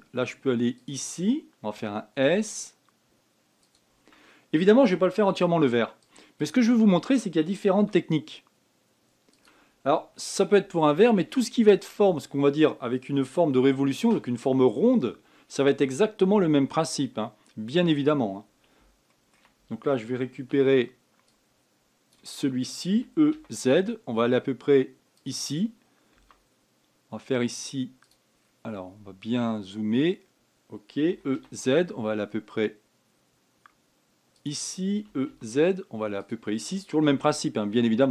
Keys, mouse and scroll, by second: 2.5 s, 6.1 ctrl+r, 8.5 s, 10.6-11.1 scroll down 1, 11.2 scroll down 3, 11.5-14.6 shift+middle drag, 19.8 shift+middle click, 20.8 a, 21.3 b, 23.7 e, 26.9 s, 29.1-30.7 scroll up 7, 30.7 scroll down 2, 31.8 e, 35.8 e.